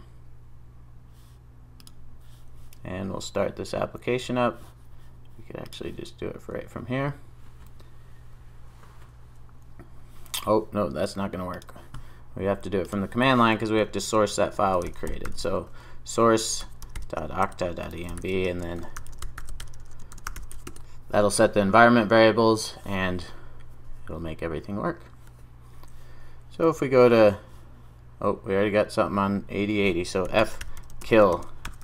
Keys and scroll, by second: 5.8 ctrl+r.